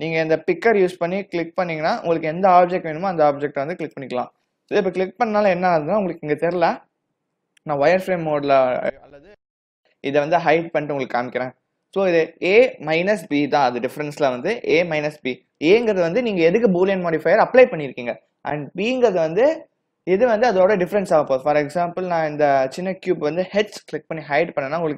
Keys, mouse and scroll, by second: 0.8 w, 1.9 click, 8.8 click, 11.9 click, 22.3 click, 24.2 h.